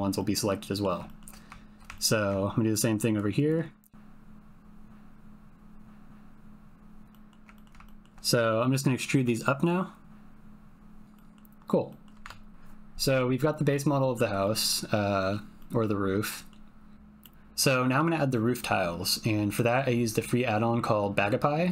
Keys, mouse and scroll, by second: 0.1 middle click, 0.2-0.9 typing, 1.0 shift+middle click, 1.9 ctrl+middle click, 3.4 shift+click, 4.7 click, 4.9 ctrl+z, 5.0 click, 5.1 ctrl+shift+click, 6.1 shift+click, 6.4 ctrl+click, 6.5 ctrl+shift+middle click, 6.8-8.0 typing, 6.9 ctrl+middle click, 7.1 middle click, 7.5 ctrl+click, 7.8 shift+click, 9.1 e, 11.2 click, 11.9 click, 12.0-12.7 typing, 13.0-14.1 drag, 14.4 click, 14.9 click, 15.5 middle click, 15.7 click, 15.7 middle click, 16.2 click, 17.2 click, 17.8 ctrl+click, 19.5 click.